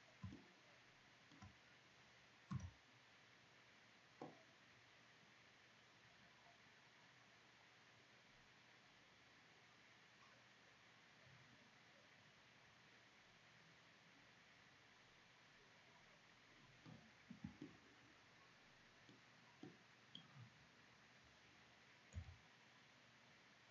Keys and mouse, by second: 2.1 c, 17.3 middle click, 19.0 middle drag, 19.3 middle click, 20.1-23.7 middle drag, 21.8 c.